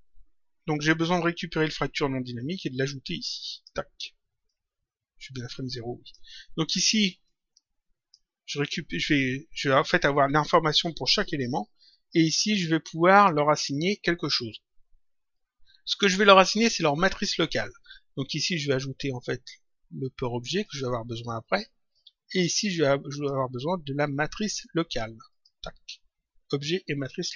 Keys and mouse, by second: 2.1 click, 4.4 click, 7.2 click, 12.1 click, 18.2 click, 20.6 click, 21.8 click, 23.0 click, 25.2 click.